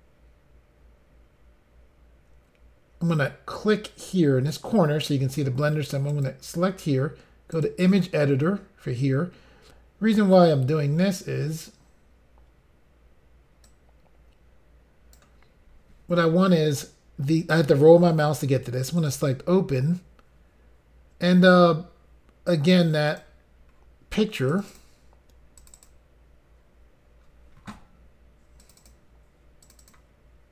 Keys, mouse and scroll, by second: 6.2 click, 6.3 click, 7.6 click, 7.7 click, 11.3-11.9 scroll down 2, 11.9 scroll up 2, 13.7 click, 17.7-18.7 scroll down 3, 19.0 click, 23.1 click, 23.3 click, 23.8 scroll down 3, 24.6 click, 24.7 click, 24.7 click, 24.8 double click, 25.6 double click, 25.8 double click, 25.9 double click, 25.9 double click, 28.7 click, 28.8 click, 28.9 double click, 29.7 double click, 29.8 double click, 29.9 double click, 30.0 double click.